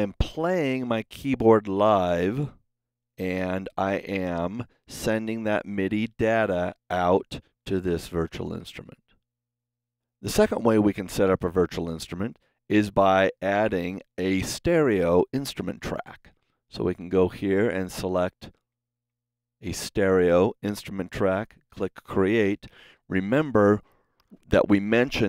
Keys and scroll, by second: 15.7 shift+super+n, 16.8 super+Right, 17.2 super+Down.